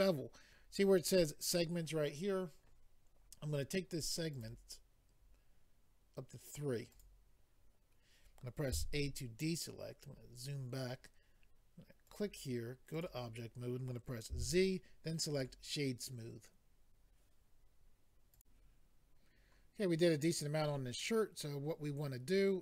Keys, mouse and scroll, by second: 4.3 click, 6.9 click, 8.7 a, 10.0-11.0 scroll down 5, 12.0 click, 12.9 click, 14.3 z, 15.4 click, 18.4 click.